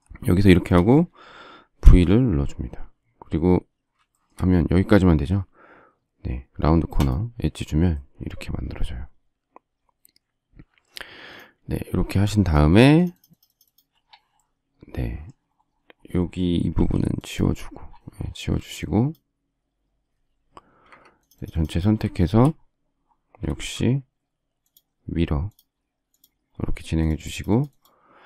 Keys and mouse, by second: 1.8 v, 7.1 click, 11.4 click, 12.0 space, 12.6 click, 16.7 e, 18.3 space, 20.8 Escape, 23.6 shift+x.